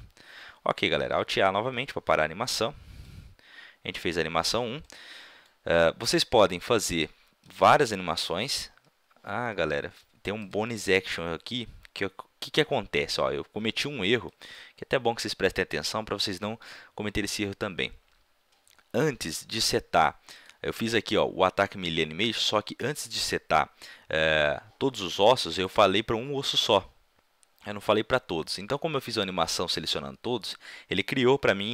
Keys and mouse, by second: 1.1 alt+a, 4.8-7.5 middle drag, 7.5 right click, 8.0 a, 8.4 a, 10.3-12.0 drag, 14.7-16.4 middle drag, 16.6-20.4 middle drag, 20.4-21.9 right drag, 21.9 click.